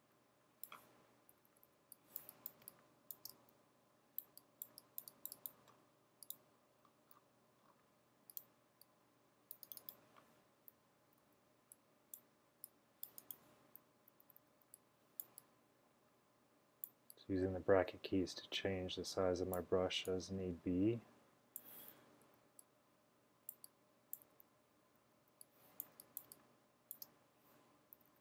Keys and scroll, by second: 1.0-3.8 typing, 10.8-11.8 typing, 13.9-15.0 typing, 22.1 typing, 24.3-25.2 typing, 26.3-28.2 typing.